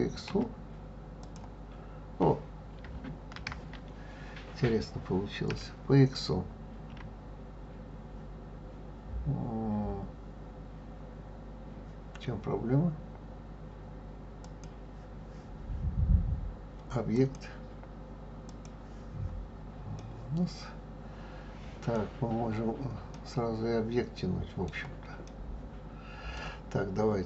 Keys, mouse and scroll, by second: 0.3 x, 3.3 ctrl+z, 5.5 s, 17.1-19.9 drag, 19.9-23.0 middle drag, 23.1-27.2 middle drag.